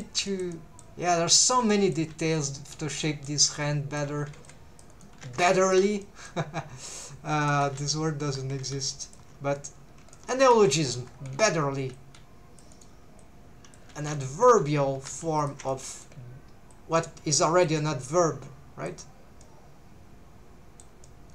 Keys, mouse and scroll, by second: 0.3 shift+middle click, 0.5 middle click, 1.4 click, 1.7 middle click, 2.4 right click, 2.4 click, 3.0 middle click, 3.5 middle click, 4.3 alt+a, 4.4 c, 4.9 right click, 5.2 alt+a, 5.4 3, 5.6 alt+shift+click, 6.0 middle click, 6.9 click, 7.7 alt+a, 7.9 scroll down 1, 8.3 3, 9.0 alt+shift+click, 10.1 shift+middle click, 10.6 alt+a, 11.3 c, 12.7 right click, 13.2 click, 14.0 alt+a, 14.2 middle click, 14.9 3, 15.4 alt+shift+click, 15.7 middle click, 16.7 click, 18.0 middle click, 19.4-20.9 middle drag, 21.0 middle click.